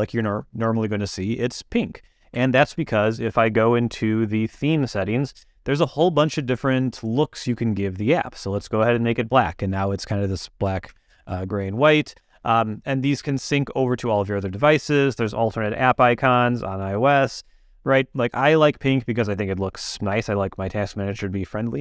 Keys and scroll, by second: 2.5 super+,, 10.8 super+,.